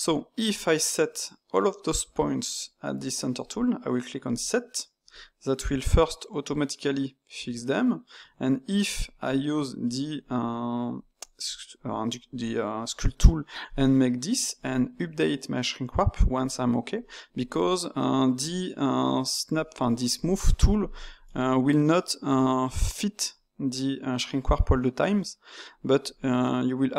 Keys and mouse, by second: 4.2-7.3 drag, 8.2 Tab, 13.0-16.6 drag, 17.0-19.0 middle drag, 19.0-21.2 drag, 21.2-26.9 middle drag.